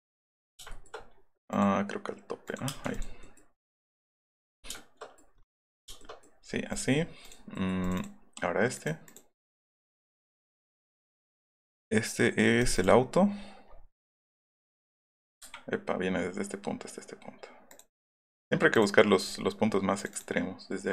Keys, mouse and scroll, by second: 0.0 middle click, 1.5 click, 2.6 space, 2.7 middle click, 4.4 middle click, 4.6 shift+middle click, 5.1 middle click, 5.8 shift+middle click, 6.4 middle click, 6.7 right click, 7.0 middle click, 7.2 right click, 7.5 middle click, 7.8 click, 8.7 click, 9.0 click, 10.1 click, 12.7 click, 15.4 Escape, 19.6 click.